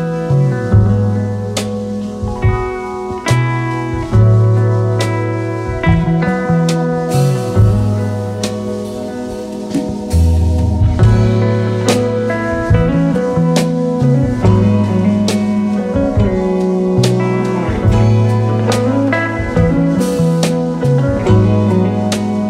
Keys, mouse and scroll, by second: 2.6 shift+click, 5.5 alt+scroll down 3, 5.9 space, 6.3 alt+scroll down 2, 6.6 space, 8.8 double click, 11.3 ctrl+c, 12.4 alt+scroll up 3, 13.0 alt+scroll up 2, 13.2-13.7 typing, 16.5 typing, 20.3 typing.